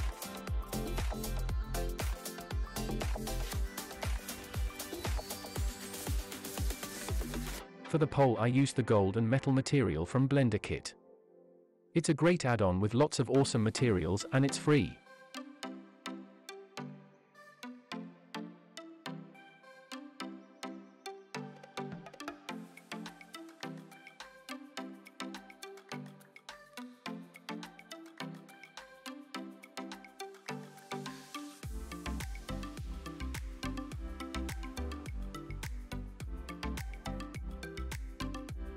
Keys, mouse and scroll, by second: 0.0 shift+middle click, 0.0 click, 0.0 scroll down 2, 0.8-1.3 shift+middle drag, 1.7 shift+middle drag, 3.1 click, 4.8 click, 7.4 click, 9.6 click, 11.7 click, 13.0-18.5 drag, 23.0 click, 25.8 click, 28.2-28.6 shift+middle drag, 29.4 click, 30.9-33.3 drag, 37.9 click.